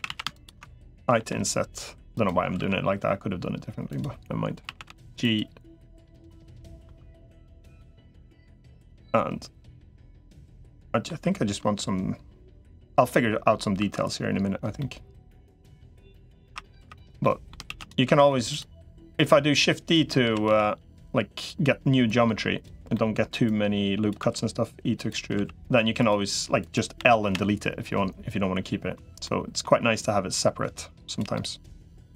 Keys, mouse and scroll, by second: 0.0-1.0 typing, 0.2 alt+shift+click, 2.4 alt+s, 4.4 a, 4.8 g, 5.8 click, 6.2 middle click, 6.8 2, 7.3 middle click, 8.2 3, 8.6 click, 9.5 middle click, 10.0 click, 10.4 middle click, 12.8 middle click, 13.6 2, 14.6 middle click, 16.4 3, 16.6 3, 16.8 click, 17.0 middle click, 17.6 shift+d, 18.0 s, 19.0 click, 20.0 s, 21.8 click, 22.7 middle click, 23.4 click, 24.0 e, 25.2 s, 26.8 l, 29.0 middle click, 29.8-31.0 drag, 31.1 middle click.